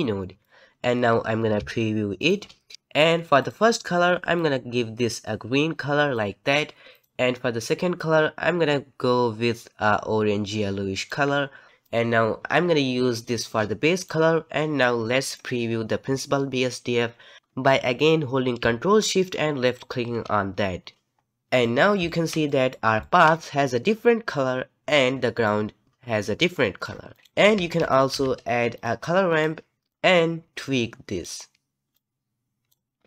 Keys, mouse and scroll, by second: 2.3 ctrl+shift+click, 4.4 click, 8.0 click, 14.1-19.8 drag, 21.6-23.3 middle drag, 23.3-23.9 scroll up 2, 23.9-24.4 scroll down 1, 24.4-27.1 middle drag, 27.1-29.3 drag, 29.3 shift+a, 29.8 ctrl+z, 29.9-33.0 drag, 33.0 scroll down 1.